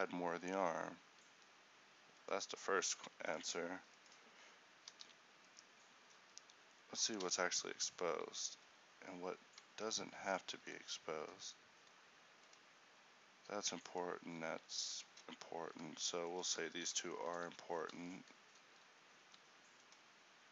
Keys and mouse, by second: 5.1 alt+r, 6.2-8.1 right drag, 6.3 z, 8.5 z, 9.9 Tab, 9.9 z, 11.3 a, 17.5 h, 18.1 z, 18.8 z.